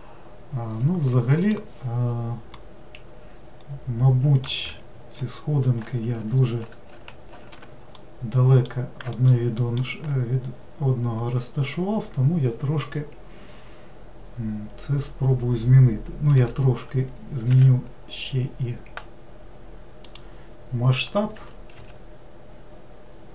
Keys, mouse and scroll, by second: 2.6-5.7 middle drag, 6.5 ctrl+z, 6.9 ctrl+z, 8.0-9.2 middle drag, 9.6 alt+middle click, 10.4-11.5 scroll up 2, 16.4 s, 21.4 g.